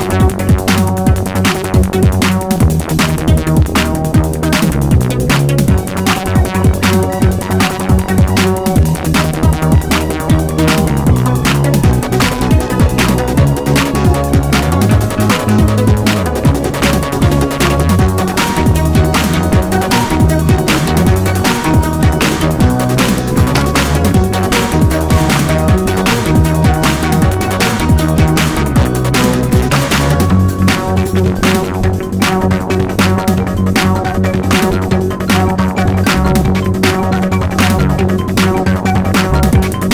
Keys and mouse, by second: 1.2-6.1 drag, 6.9-10.4 drag, 11.4-15.7 drag, 17.1-20.9 drag, 22.6-25.9 drag, 26.6-31.8 drag, 32.8 click, 36.7 click, 38.0 click.